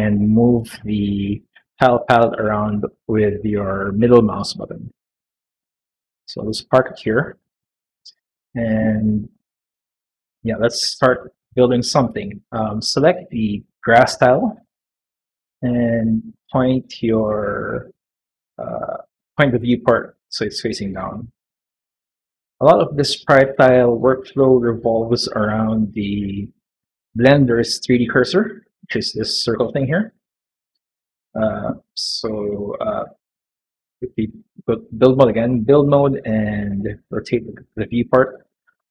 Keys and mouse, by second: 16.1-21.5 middle drag, 26.1 click, 31.9 middle click, 34.8 click, 36.3-38.9 middle drag.